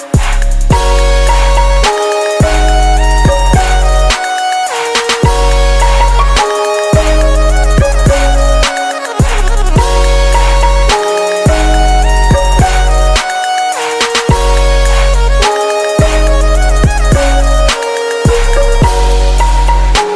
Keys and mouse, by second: 4.7-6.6 drag, 7.0-9.9 drag, 11.1-12.9 drag, 13.5-15.3 drag, 18.8-20.1 drag.